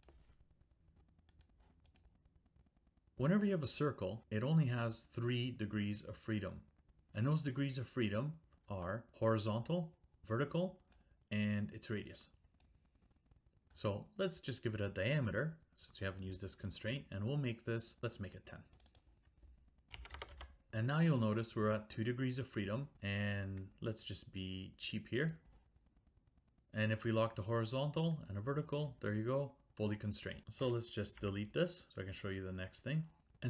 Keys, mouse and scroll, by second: 0.0 click, 1.4 click, 2.0 click, 3.1 click, 8.7 Escape, 10.9 click, 16.3 click, 18.8 click, 19.0 click, 19.7-20.7 typing, 25.3 click, 30.4 click, 31.2 Delete, 32.2 click, 33.3 click.